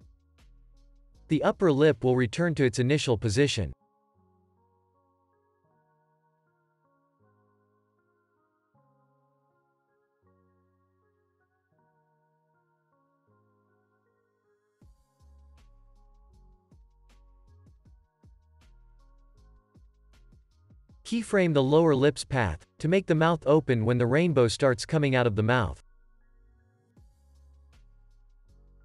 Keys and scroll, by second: 2.6 ctrl+c, 4.2 ctrl+c, 6.1 ctrl+c, 10.4 Up, 12.6 ctrl+s, 15.2 ctrl+c, 17.0 ctrl+s, 28.2 ctrl+s.